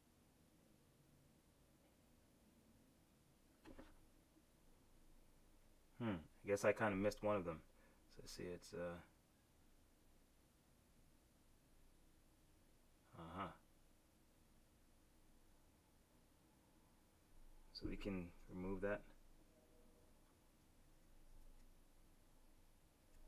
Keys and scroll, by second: 19.0 shift+F6, 20.7 shift+F5.